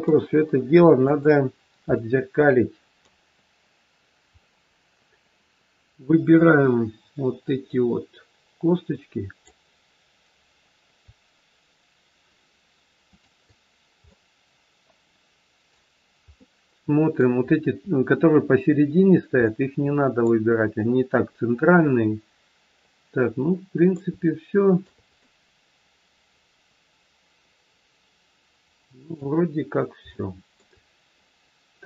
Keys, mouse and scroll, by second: 0.9 click, 1.5-1.9 scroll down 2, 1.9 middle click, 4.3-5.0 scroll up 3, 5.9 click, 13.0 shift+click, 14.0 middle click, 16.0 scroll up 1, 16.3 middle click, 17.8-19.0 scroll up 1, 19.4 middle click, 20.8 middle click, 24.3 shift+middle click, 25.0 middle click, 29.4 scroll down 1, 30.2 shift+middle click.